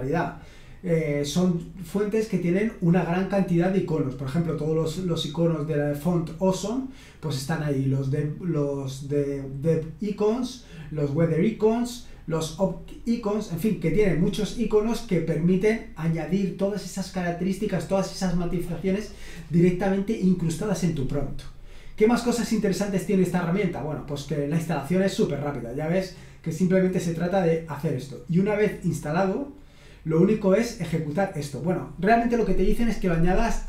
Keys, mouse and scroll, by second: 0.7-2.7 scroll down 1, 12.2-13.1 scroll down 1, 13.1-14.7 scroll down 1, 22.0 click, 22.8-25.3 scroll down 2, 28.2-30.5 scroll down 2, 30.6-31.9 drag.